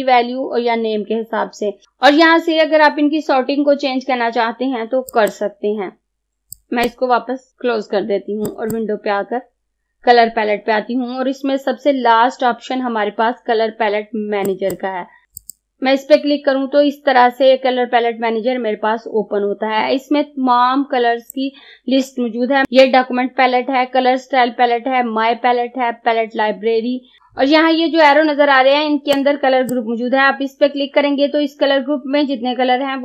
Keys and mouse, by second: 14.5 click, 21.4-27.2 drag, 27.2 click, 29.2-32.1 drag.